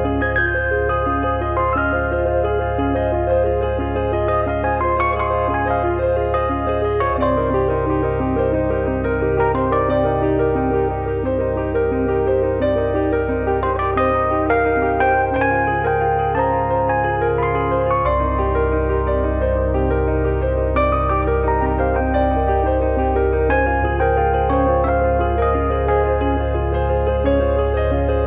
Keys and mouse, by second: 0.2 click, 1.1 middle click, 1.5 click, 2.9 click, 3.8 click, 4.6 click, 5.9 click, 6.5 click, 7.4 middle click, 7.6 shift+i, 10.0 e, 12.2 click, 13.5 shift+middle click, 16.8 click, 17.7 click, 20.2 click, 20.7 click, 22.1 click.